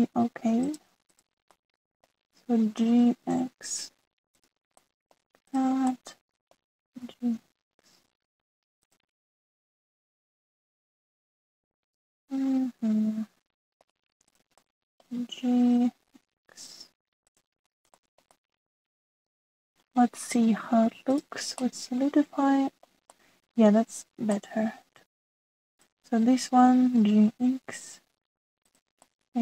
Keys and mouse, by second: 0.2 middle click, 2.0 shift+middle click, 2.5 middle click, 3.9 g, 5.7 click, 6.5 middle click, 6.8 middle click, 8.0 g, 10.5 g, 12.2-13.4 middle drag, 13.6 middle click, 13.7 middle click, 14.0 middle click, 15.6 middle click, 16.6 g, 18.7 shift+middle click, 19.3-20.8 middle drag, 22.6-23.8 middle drag, 24.1 middle click, 25.3-26.3 middle drag, 26.7 click, 27.9 g.